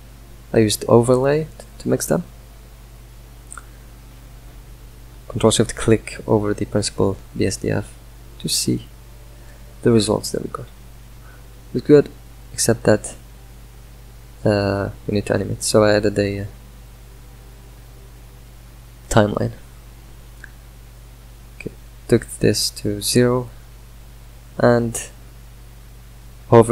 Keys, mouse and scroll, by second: 7.4-9.2 middle drag, 9.2 ctrl+s, 9.4-11.4 middle drag, 14.9 right click, 21.7-26.7 drag.